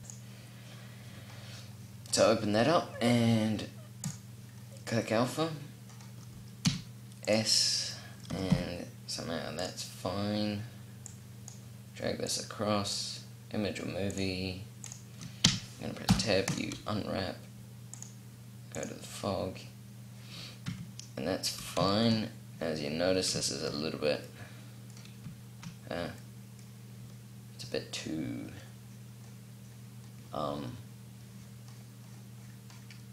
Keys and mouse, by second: 0.9 click, 1.8 middle click, 3.6 middle click, 3.9-5.5 drag, 6.4 s, 7.0 click, 7.7-10.9 drag, 8.1 s, 15.2 Tab, 15.8 u, 20.5 Tab, 28.9-30.3 middle drag.